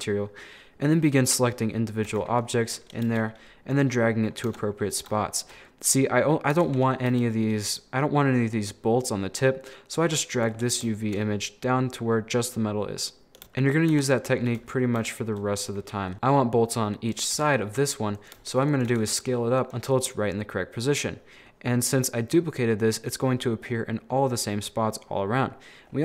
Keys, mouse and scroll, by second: 0.0 scroll down 1, 2.1 a, 3.1 g, 4.5 Tab, 4.8 scroll up 4, 5.2-6.6 shift+middle drag, 6.6 Tab, 7.1 g, 10.6 scroll up 5, 10.9-13.0 shift+middle drag, 13.2 scroll down 4, 13.4 shift+middle click, 13.6 right click, 13.9 Tab, 14.6 a, 14.9 scroll down 4, 15.1-16.1 shift+middle drag, 16.1 g, 17.4 s, 18.4 g, 18.9 s, 19.7 Tab, 20.2-23.7 middle drag, 23.7 scroll up 3, 24.0 middle click, 24.4 scroll down 1, 24.5-26.0 middle drag, 25.9-26.0 scroll up 4.